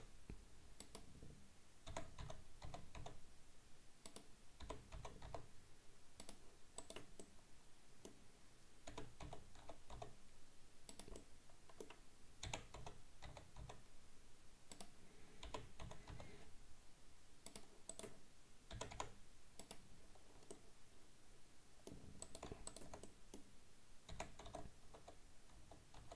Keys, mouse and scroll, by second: 1.9 r, 4.7 g, 6.8 right click, 7.2-8.9 middle drag, 8.9 g, 11.2-12.5 middle drag, 12.5 r, 15.5 g, 17.9 right click, 18.8 g, 20.0-20.5 scroll down 2, 20.5-22.3 middle drag, 22.3 right click, 22.7 shift+right click, 23.1-24.1 middle drag, 24.1 r.